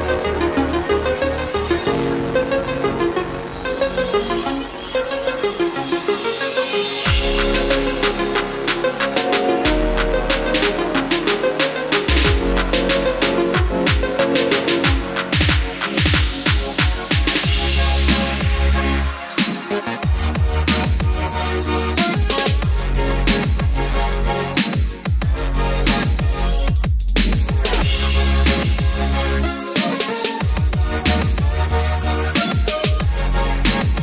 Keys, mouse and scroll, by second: 0.9-21.0 drag, 22.3 KP_4, 23.0 KP_4, 25.2 click, 27.4 scroll down 1, 29.0-33.3 drag, 33.9 scroll up 1.